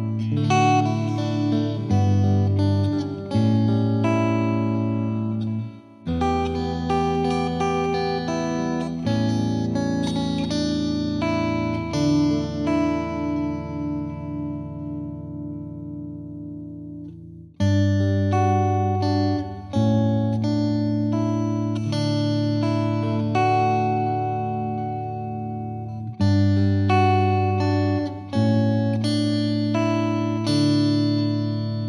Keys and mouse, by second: 0.7 click, 1.3 click, 2.1 click, 2.5 click, 2.9 click, 3.2 click, 3.7 click, 5.2 click, 5.7 Delete, 5.9 click, 6.0 Delete, 6.3 click, 6.8 click, 7.5 click, 8.7 click, 9.4 click, 10.1 click, 10.2 Page_Up, 10.8 F3, 11.1 F3, 11.3 F2, 11.6 click, 12.5 click, 15.1 click, 15.6 Delete, 16.0 click, 16.6 click, 20.5 click, 23.7 click, 24.2 click, 29.6 click.